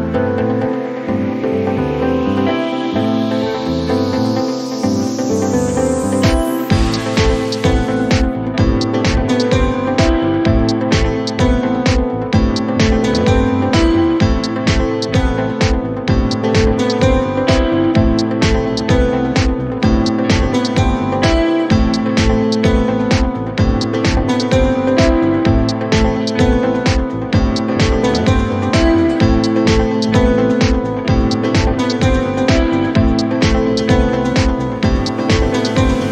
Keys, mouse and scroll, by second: 0.4 shift+d, 1.8-3.3 middle drag, 3.3-7.9 drag, 8.0-9.4 middle drag, 9.4-10.9 drag, 10.9-11.6 scroll up 2, 11.6-13.1 middle drag, 19.1-20.7 drag, 24.1 click, 24.6 middle click, 25.5-25.9 scroll up 1, 25.9-26.3 scroll down 2, 26.3 click, 26.7-28.3 middle drag, 30.6 scroll down 1, 30.8-32.7 middle drag, 34.6 scroll up 2, 34.9-36.1 middle drag.